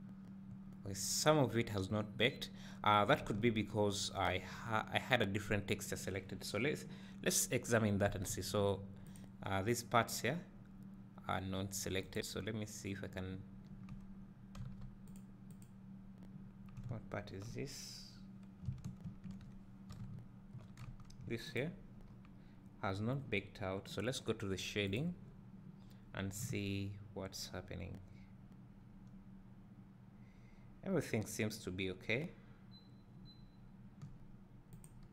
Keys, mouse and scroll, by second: 3.5 Tab, 7.8-9.1 drag, 14.7 a, 15.2 click, 16.9 `, 19.1 ctrl+l, 21.2 Tab, 21.6 click, 22.1 scroll up 1, 23.0-23.3 scroll down 1, 24.9 click, 34.7 click.